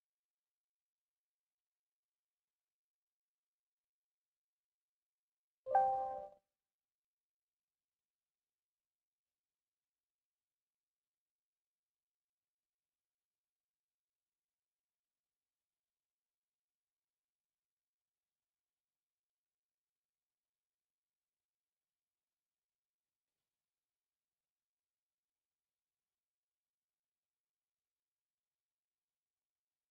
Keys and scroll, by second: 4.6 F8, 6.5 Return, 7.6 Escape, 7.7 t, 7.9 space, 8.2 Escape, 12.6 e, 12.9 space, 13.4 Escape, 13.9 s, 15.8 Return, 17.6 Return, 19.3 Return, 21.2 Return, 25.0 Return, 28.9 Escape, 29.4 m.